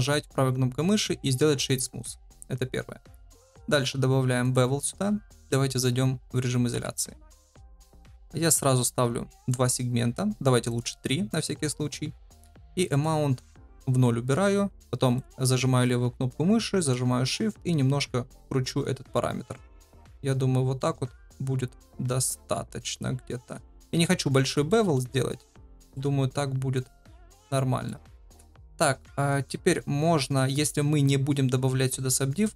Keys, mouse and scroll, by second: 0.1-1.7 right drag, 6.7 KP_Divide, 7.6 shift+middle drag, 10.7 click, 12.8 click, 14.8 click, 15.8-23.8 drag, 24.3 shift+middle drag, 24.6 middle drag, 25.4-25.9 shift+middle drag, 26.7-27.8 middle drag.